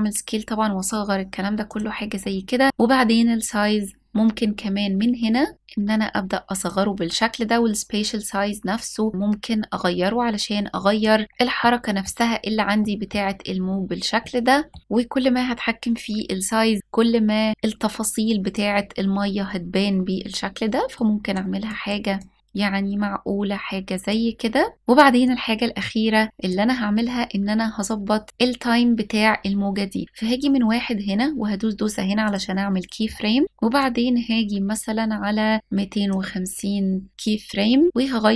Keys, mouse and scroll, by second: 1.3 click, 1.6-2.2 scroll up 2, 5.4-10.7 drag, 11.1 scroll up 1, 11.2-11.8 middle drag, 12.4 middle click, 12.9 scroll up 1, 13.8-14.4 middle drag, 13.8-14.4 scroll up 2, 14.8-18.6 drag, 20.6 click, 21.8-23.7 drag, 24.9-26.3 drag, 26.5-28.2 scroll down 2, 28.2-28.8 scroll up 1, 31.9-37.2 drag.